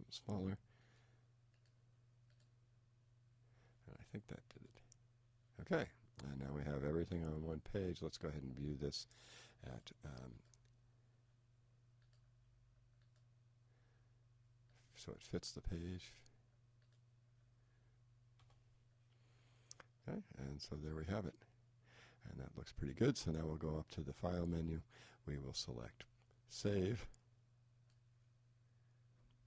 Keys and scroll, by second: 6.5 Up, 18.4 Return.